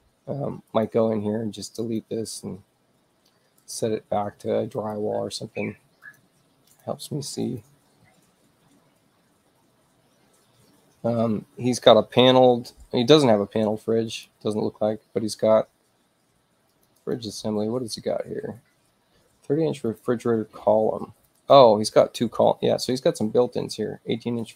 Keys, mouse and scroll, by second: 0.7 click, 1.8 click, 3.6 click, 4.7 click, 6.0 click, 6.7 click, 7.5 click, 13.4 space, 14.1 click, 16.7 click, 17.0 click, 19.8 click, 21.2 click, 21.3 click.